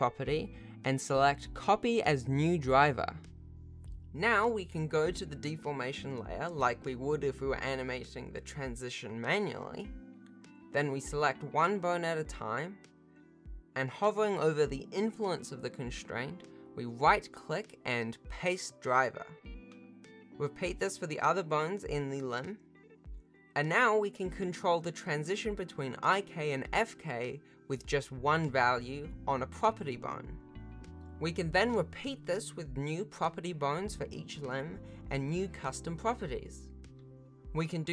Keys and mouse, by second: 0.3-1.6 drag, 3.4 n, 7.8 click, 9.2 click, 11.1-12.5 drag, 13.2-15.3 right drag, 21.8 right click, 22.2 right click, 22.5 right click, 23.4 click, 25.4 g, 27.2 click, 27.4 r, 27.9 click, 27.9 r, 28.4 click, 29.5-31.7 drag, 32.0 click, 32.2 alt+z, 32.2 alt+r, 32.2 alt+g, 32.2 alt+a, 32.2 ctrl+s, 32.6 click, 32.9 ctrl+s, 33.2 shift+click, 34.1 ctrl+s, 34.1 shift+click, 34.1-37.4 typing, 34.3 ctrl+s, 34.6 alt+a, 34.6 ctrl+s, 34.9 shift+click, 34.9 ctrl+s, 35.0 ctrl+s, 35.2 click, 35.3 Return, 35.5 ctrl+s, 35.7 ctrl+s, 35.8 click, 36.1 ctrl+s, 36.2 shift+Tab, 36.5 click, 37.1 click, 37.2 ctrl+s, 37.4 alt+r, 37.4 ctrl+s, 37.6 click, 37.8 ctrl+s.